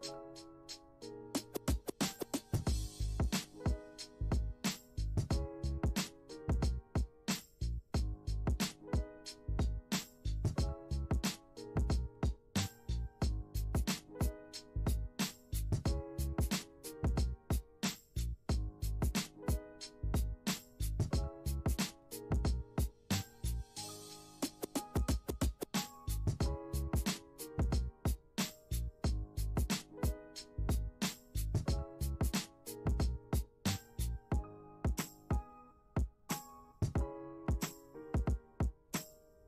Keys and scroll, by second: 24.8 space.